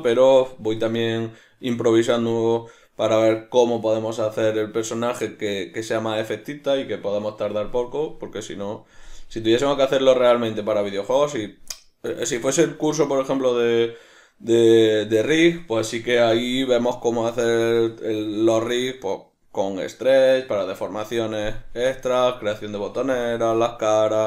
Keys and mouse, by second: 3.0 right click, 11.7-24.2 middle drag.